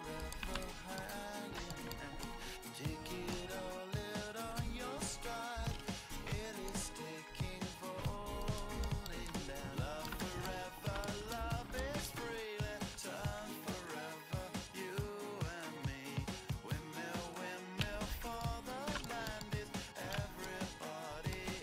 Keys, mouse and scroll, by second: 0.4 w, 1.0-2.3 middle drag, 4.7 z, 6.7-8.5 drag, 8.5-9.6 right drag, 9.2 w, 9.6 click, 10.6 middle click, 12.5 right click, 13.0 Tab, 18.1 alt+z, 18.5-20.7 middle drag.